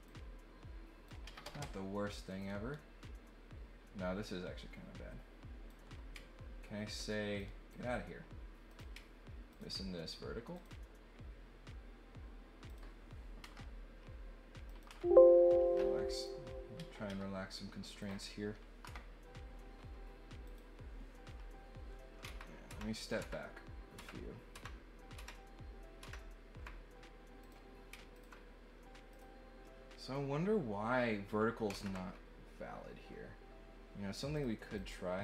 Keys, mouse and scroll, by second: 0.0-1.0 drag, 1.2 Escape, 1.4 Escape, 2.4-5.7 drag, 7.3 click, 8.7 click, 9.5 ctrl+click, 10.5 click, 12.6 click, 14.7 click, 14.8 Delete, 16.0 click, 16.7 Escape, 17.0 Escape, 18.0 click, 20.4 click, 27.4 click, 28.1 ctrl+click, 29.0 click, 34.3 click, 34.7 click.